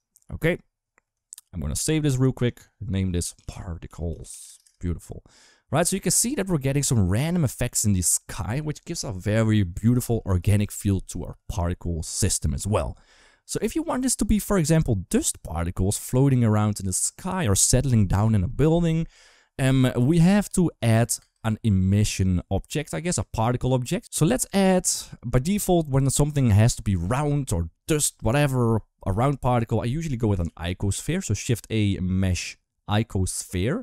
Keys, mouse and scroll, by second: 0.1 ctrl+s, 1.6 ctrl+s, 8.2 ctrl+s, 14.4 click, 21.0 space, 24.6 right drag, 30.2 shift+a.